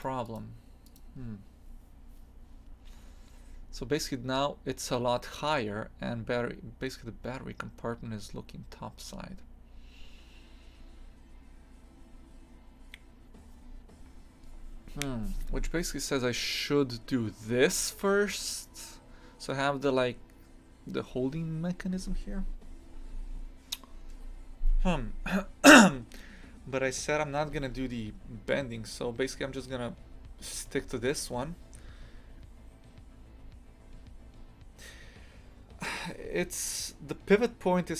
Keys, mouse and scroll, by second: 3.0-4.1 scroll down 2, 29.2-30.7 scroll up 1, 30.7-37.9 scroll up 1.